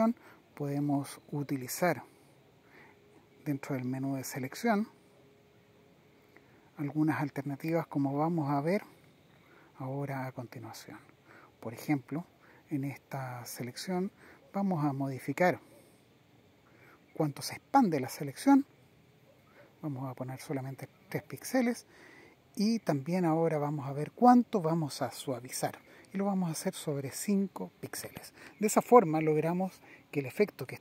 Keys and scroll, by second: 2.5 super+z, 4.2 super+z, 5.8 super+z, 6.5 super+z.